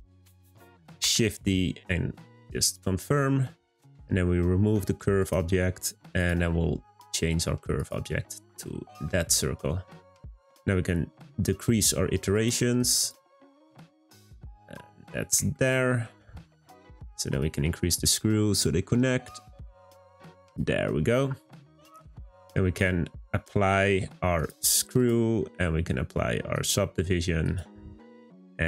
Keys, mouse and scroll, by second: 1.1 shift+d, 5.2 click, 6.1 click, 8.8 scroll up 2, 9.0-12.1 shift+middle drag, 12.3-14.5 drag, 14.5-16.5 middle drag, 16.5-17.0 scroll up 1, 17.3-20.5 shift+drag, 21.0-21.4 scroll down 2, 21.4-24.3 middle drag, 24.3-28.6 drag.